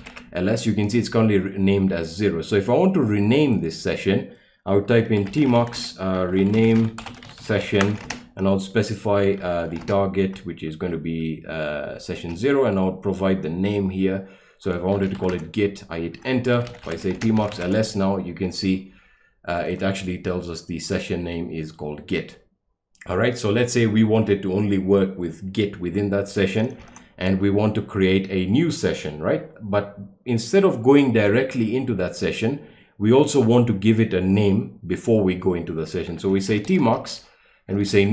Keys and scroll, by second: 0.0-0.5 typing, 4.9-10.8 typing, 12.1 typing, 14.7-17.9 typing, 26.8 ctrl+l, 35.9-38.1 typing.